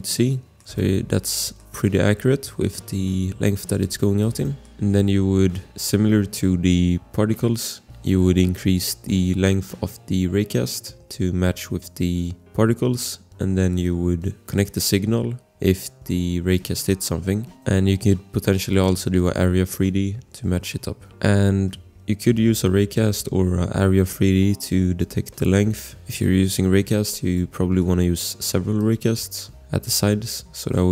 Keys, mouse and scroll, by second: 0.5 click, 0.5 scroll, 0.7 shift+click, 1.1 click, 1.3 click, 1.4 scroll, 1.5 click, 3.7 click, 3.9 click, 4.2 click, 4.4 click, 4.6 click, 4.7 click, 14.6 click, 21.1 scroll, 22.2 click, 25.8 scroll, 26.5 click, 27.3 click, 27.8 click, 28.1-28.8 scroll, 28.8 click.